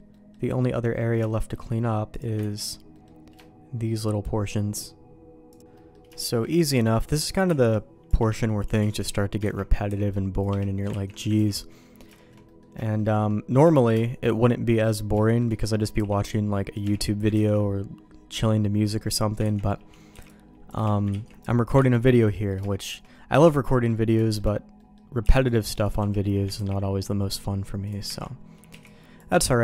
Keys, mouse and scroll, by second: 0.1 middle click, 0.9 middle click, 1.3 shift+middle click, 2.1 click, 2.4 ctrl+x, 2.9 middle click, 3.4 shift+middle click, 5.7 middle click, 6.1 shift+middle click, 7.2 middle click, 7.4 c, 8.8 ctrl+q, 9.5 ctrl+x, 9.9 c, 10.9 ctrl+q, 11.4 ctrl+x, 11.5 middle click, 12.1 shift+middle click, 12.4 middle click, 12.8 shift+middle click, 13.1 middle click, 13.7 shift+middle click, 14.4 middle click, 15.2 shift+middle click, 16.0 c, 17.3 ctrl+q, 19.1 click, 19.5 ctrl+x, 20.1 c, 21.3 ctrl+q, 21.9 ctrl+x, 22.3 middle click, 22.7 shift+middle click, 23.1 middle click, 23.7 middle click, 24.2 middle click, 24.8 middle click, 25.2 c, 26.5 ctrl+q, 28.1 ctrl+x, 28.7 c.